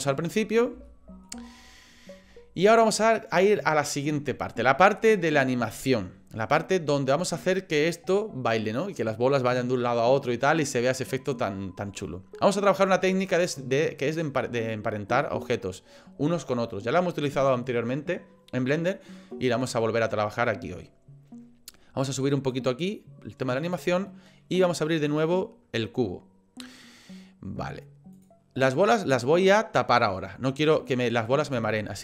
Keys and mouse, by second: 0.0 click, 0.9 shift+middle click, 1.4 middle click, 22.7 click, 25.1 click, 28.1 click, 30.7 click.